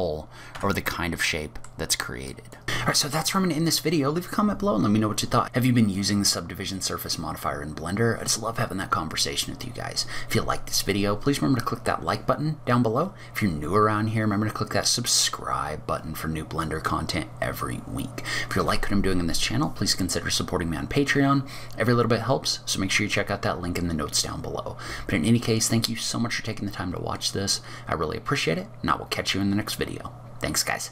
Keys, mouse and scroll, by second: 0.6 Tab, 1.0 middle click, 2.4 click.